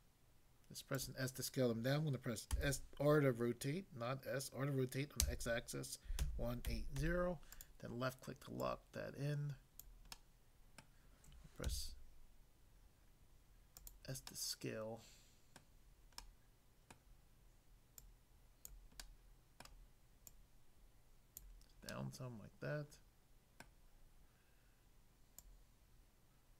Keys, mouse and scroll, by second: 0.9 click, 2.5 r, 5.3-7.0 typing, 7.6 click, 8.6 click, 9.8 click, 10.2 middle click, 10.8 middle click, 11.7 s, 13.8 click, 14.2 middle click, 15.6 middle click, 16.2 middle click, 17.0 middle click, 18.0 click, 18.6 click, 19.0 middle click, 19.6 middle click, 20.3 click, 21.4 click, 21.9 middle click, 23.6 middle click, 25.4 click.